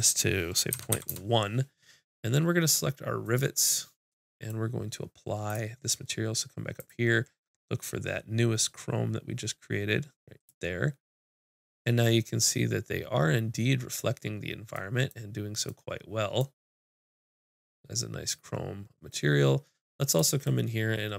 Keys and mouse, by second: 3.3-5.6 drag, 4.5 middle click, 4.5-5.6 right drag, 5.8-8.7 drag, 12.1-15.4 middle drag, 15.9 middle click, 20.2-21.1 drag, 20.2 right click.